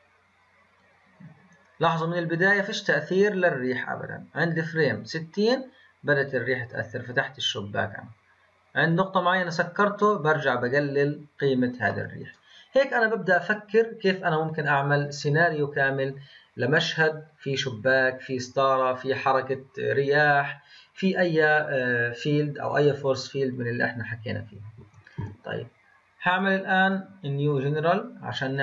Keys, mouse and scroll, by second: 12.3-22.7 middle drag, 22.7 click, 24.8 Delete, 25.0 click, 25.2 Delete, 26.3-28.6 drag.